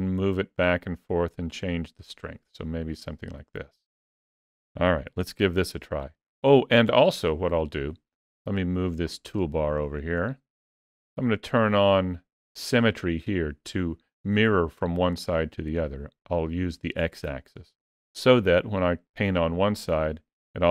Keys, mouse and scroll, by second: 9.1 middle click, 14.8 click, 19.4 click.